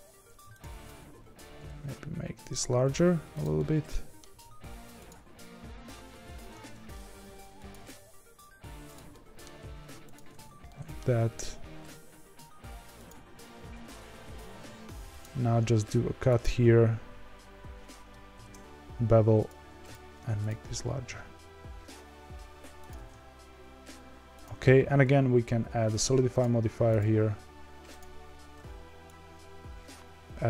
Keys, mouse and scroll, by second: 0.1 3, 0.5 alt+click, 1.1 s, 3.5 middle click, 4.2 g, 5.8 s, 7.7 g, 9.1 middle click, 9.5 2, 10.1 alt+click, 10.6 middle click, 11.0 g, 13.7 ctrl+r, 19.5 3, 20.4 alt+click, 21.0 s, 22.9 g, 24.6 Tab, 27.9-30.4 drag.